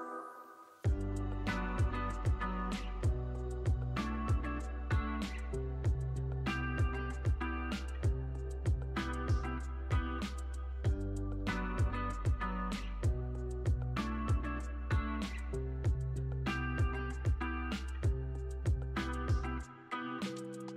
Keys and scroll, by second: 1.2 x, 3.8 k, 6.0 k, 8.5 super+c, 8.7 z, 9.4 super+v, 10.0 x, 10.8 z, 12.0 x, 13.3 z, 15.5 x, 18.6 z, 20.5 k.